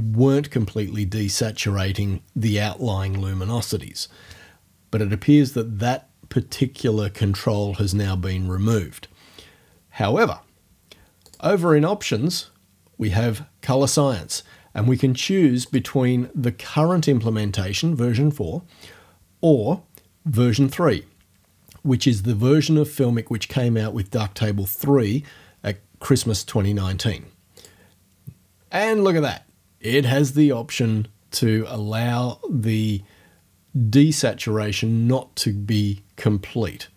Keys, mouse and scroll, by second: 11.3 click, 15.6 click, 27.6 click.